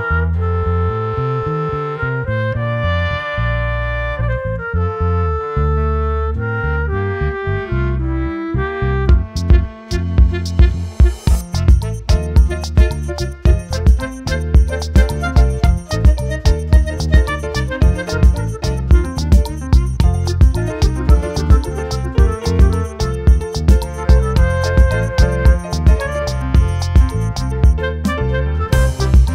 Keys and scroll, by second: 10.2 ctrl+t, 16.0 ctrl+t, 26.1 ctrl+t.